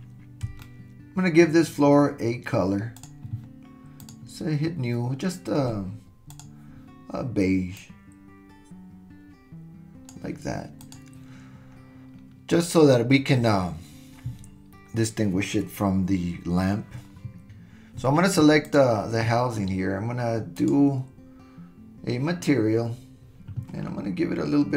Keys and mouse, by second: 0.6-0.9 shift+middle drag, 4.0 click, 10.8 click.